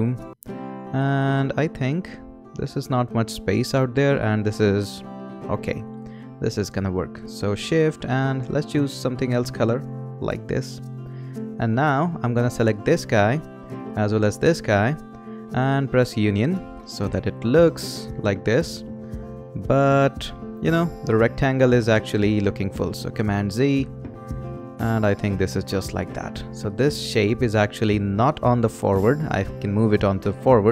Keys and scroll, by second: 23.1 super+z.